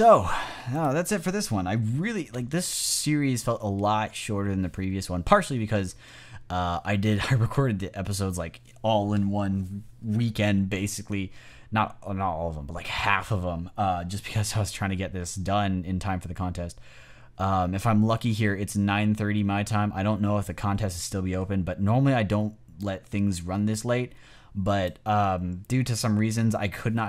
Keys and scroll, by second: 2.6 super+s.